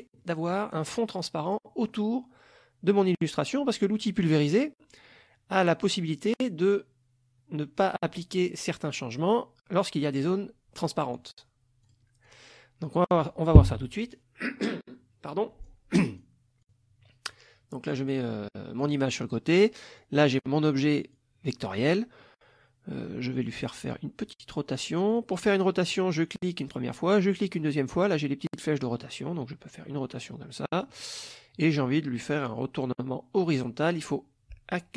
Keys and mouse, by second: 0.2 middle click, 1.5 click, 4.3 click, 11.9 click, 12.3 click, 15.7 click, 16.7-17.5 drag, 18.5-19.0 middle drag, 19.5 click, 20.0-21.3 drag, 23.9 click, 25.1 click, 25.9 click, 27.1 click, 29.0-31.0 drag.